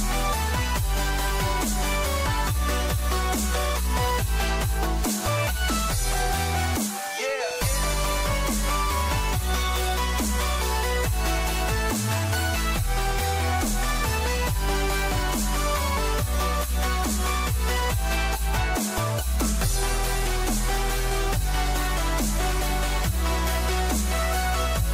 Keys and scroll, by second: 5.9 ctrl+-, 7.6 ctrl+shift+a.